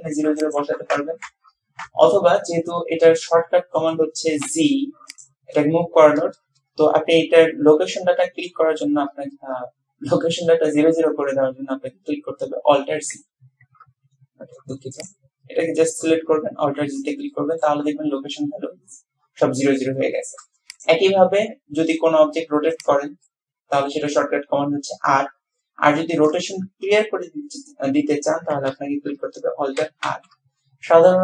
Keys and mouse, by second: 0.4-2.1 drag, 2.7-3.4 drag, 4.5 g, 16.4 alt+g, 17.4 click, 20.2 shift+click, 20.7 click, 21.6 r, 23.3-26.6 drag, 30.1 alt+r, 31.0-31.2 drag.